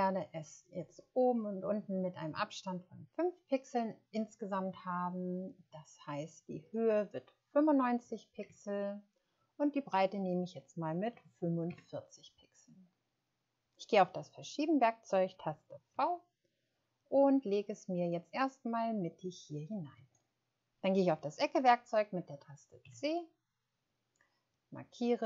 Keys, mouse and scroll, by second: 7.7 typing, 8.4 Return, 11.1 typing, 11.6 Return, 15.9 v, 22.8 c.